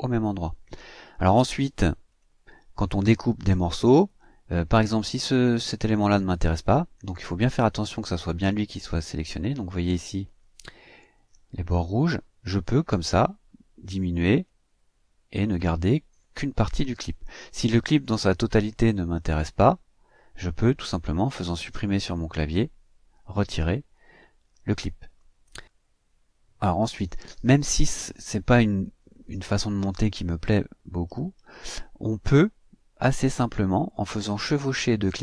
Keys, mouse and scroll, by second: 2.1 click, 6.9 click, 12.4 click, 14.4-15.7 drag, 17.8 click, 22.3 Delete, 30.1-30.5 ctrl+scroll up 2, 30.8-31.4 ctrl+scroll up 4, 33.1-34.2 drag, 34.8 click.